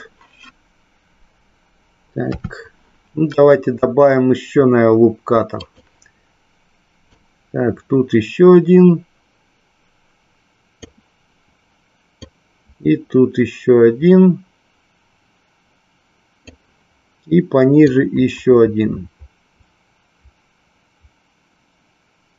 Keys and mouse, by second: 2.2 KP_3, 5.6 click, 7.1-10.7 drag, 12.2-16.5 drag, 17.9-22.3 drag.